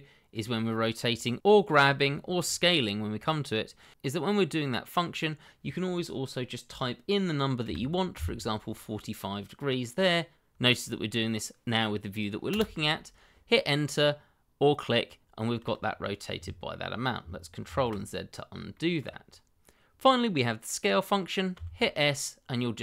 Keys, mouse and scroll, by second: 4.1 r, 7.6 KP_4, 8.1 KP_5, 13.2 Return, 14.9 middle click, 17.6 ctrl+z, 18.7 shift+middle click, 18.8 middle click, 18.8 shift+middle click, 20.0 middle click, 21.5 s.